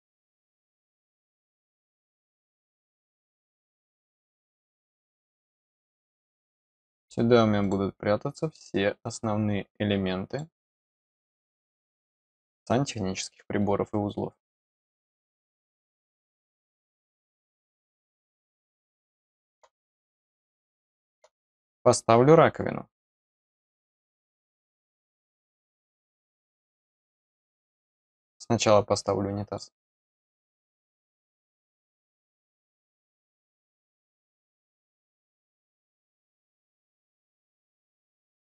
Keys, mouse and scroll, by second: 3.4 click, 4.8 click, 7.5 click, 8.9 click, 10.2 click, 10.9 click, 15.6 click, 15.8 click, 17.5-19.5 middle drag, 19.7 scroll up 1, 20.4 middle click, 26.4-29.5 drag, 34.6 click, 34.8 click, 36.7 click, 37.3 click.